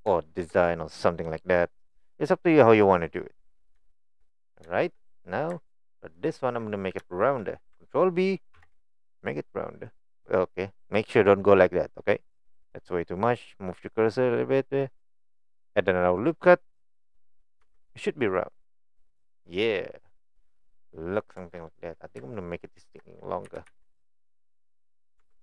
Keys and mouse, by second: 0.2 shift+middle click, 3.1 middle click, 3.4 middle click, 3.9 shift+middle click, 4.6 shift+middle click, 6.2 alt+click, 6.7 middle click, 7.1 shift+middle click, 8.5 ctrl+b, 17.6 Tab, 18.7 middle click, 19.7 middle click, 20.6 middle click, 21.4 Tab, 23.5 g, 25.2 Tab.